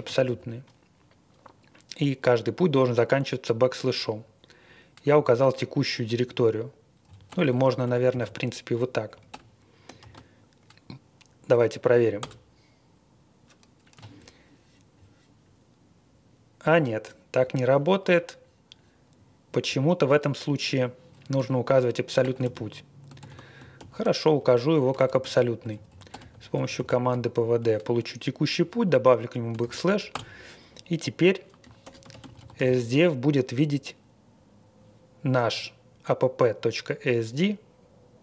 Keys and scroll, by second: 0.0-1.1 typing, 5.1 Left, 6.0 Right, 7.0 Left, 7.2 BackSpace, 7.6 BackSpace, 7.8 BackSpace, 8.2 /, 9.1 Right, 9.3 BackSpace, 10.0 ctrl+e, 12.2 Return, 21.3 q, 22.2 BackSpace, 22.4 ctrl+d, 23.2 ctrl+d, 23.7 ctrl+l, 24.9 ctrl+a, 25.2 alt+f, 25.7 Left, 25.9-27.2 typing, 28.5 Right, 29.6 ctrl+e, 30.1 Return, 31.8 ctrl+e, 31.8-32.6 typing.